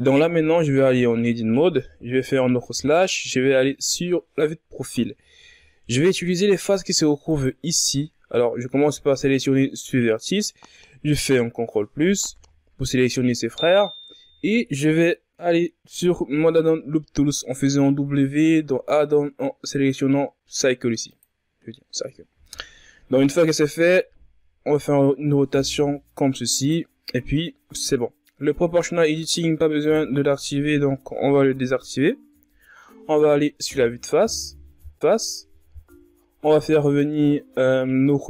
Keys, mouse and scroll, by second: 0.5 Tab, 2.2 KP_Divide, 3.6 KP_3, 5.4-6.5 shift+scroll up 9, 7.3 right click, 11.3 ctrl+KP_Add, 24.0 r, 29.8 click, 32.3 KP_1, 34.9 KP_Divide.